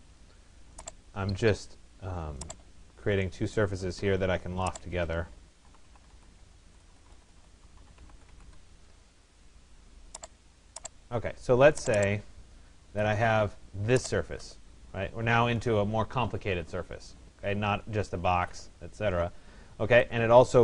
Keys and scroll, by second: 5.6 t, 6.7 BackSpace, 8.4 Return.